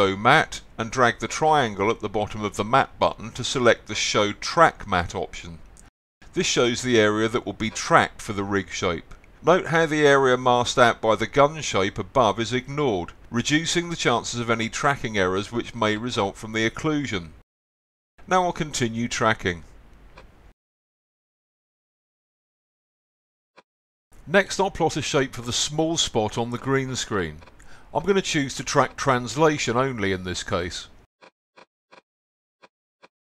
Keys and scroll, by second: 15.7 z, 16.0 x.